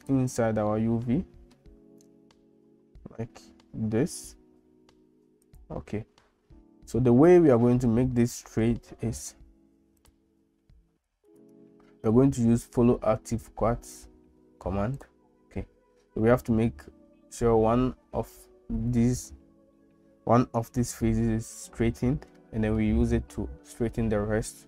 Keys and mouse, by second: 0.7 middle click, 2.1 g, 10.0 click, 11.3-14.8 right drag.